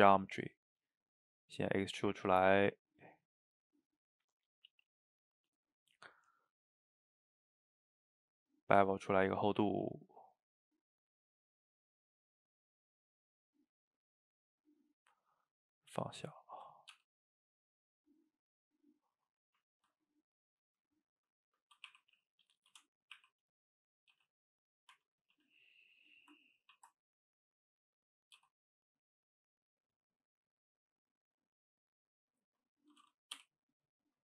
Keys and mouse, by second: 1.1-4.1 shift+drag, 4.1-7.2 middle drag, 7.6 middle click, 8.6-10.0 shift+drag, 10.0-11.4 middle drag, 11.4-14.5 shift+drag, 14.5-16.9 middle drag, 16.9 g, 18.9-21.9 middle drag, 21.9 r, 23.2 r, 24.2 g, 25.0 Tab, 25.4 a, 26.8 ctrl+t, 28.4 g, 29.6 click, 29.8-31.8 middle drag, 31.8 click, 32.4 shift+click, 33.4 o, 33.7-34.2 middle drag.